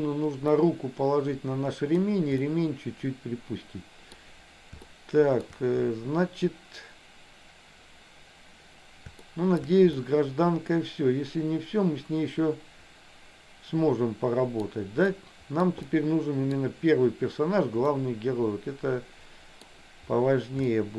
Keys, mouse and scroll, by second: 0.7-2.0 middle drag, 2.5-4.2 middle drag, 4.8 shift+middle click, 9.4 shift+middle click, 10.1-14.7 middle drag, 15.4 middle click, 15.9 middle click, 17.9-19.7 middle drag, 20.8 shift+middle click.